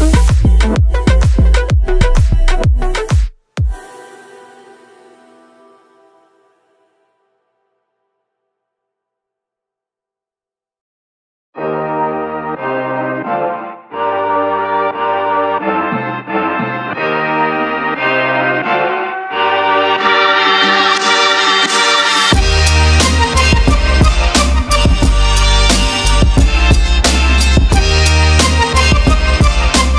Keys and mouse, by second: 5.0 shift+middle click, 7.1 ctrl+middle drag, 8.4 shift+middle click, 23.5 BackSpace, 24.3 Left, 25.1 f, 28.2 shift+middle click, 28.8 ctrl+middle click, 29.2 shift+middle click.